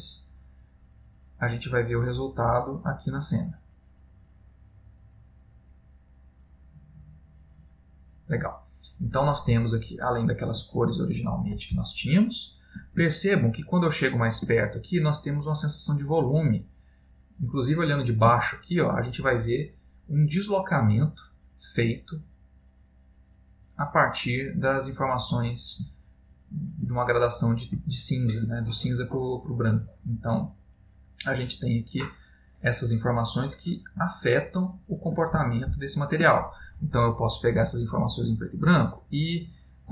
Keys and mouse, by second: 9.8 middle click, 10.9 ctrl+middle click, 12.0 shift+middle click, 13.2 ctrl+middle click, 16.8 middle click, 18.7 ctrl+middle click, 25.0 middle click, 26.0 ctrl+middle click, 27.1 middle click, 28.1 ctrl+middle click, 28.9 middle click, 35.5 middle click, 35.7 ctrl+middle click, 37.6 click.